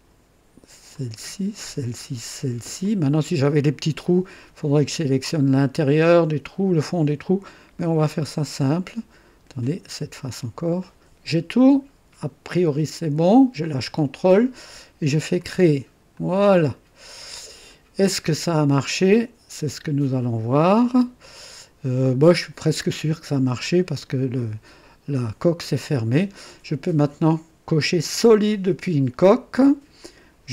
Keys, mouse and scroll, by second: 0.9 ctrl+click, 1.6 ctrl+click, 2.8 ctrl+click, 8.4 ctrl+click, 10.1 ctrl+click, 10.8-12.0 ctrl+drag, 14.0 click, 15.4 click, 16.1-17.9 drag, 24.4-26.2 drag, 28.2 click, 30.0 click.